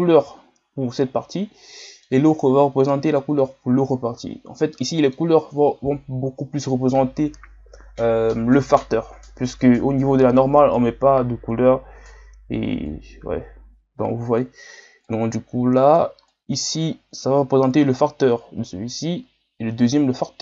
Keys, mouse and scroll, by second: 0.0-1.8 drag, 1.8-14.4 middle drag, 14.4-20.4 click.